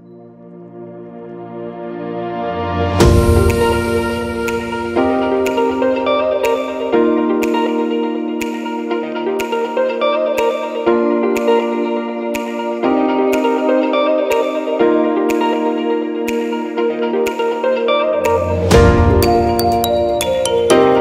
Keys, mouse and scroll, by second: 2.3 click, 2.9 Tab, 3.6 alt+a, 4.6 l, 5.9 l, 8.7 click, 14.2 click, 18.3 shift+middle click, 18.7 alt+a, 19.2-19.8 scroll up 1, 19.8 middle click, 19.8 scroll up 1, 20.4 shift+middle click, 20.8-21.0 scroll up 3.